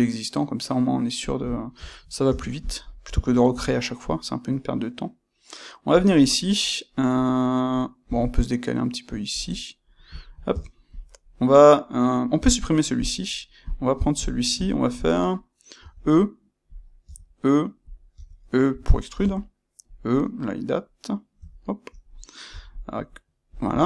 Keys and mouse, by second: 1.3 click, 1.5-2.5 shift+middle drag, 2.2 Tab, 2.5 click, 3.4 g, 6.0 click, 8.0 g, 9.4 click, 10.1 shift+middle click, 10.4 Tab, 10.8 click, 12.3 x, 13.6 click, 14.2-16.7 ctrl+middle drag, 15.7 e, 16.7 click, 17.0 e, 17.8 click, 18.0 e, 18.9 click, 19.1 e, 21.9 click, 22.4 e, 23.5 ctrl+click.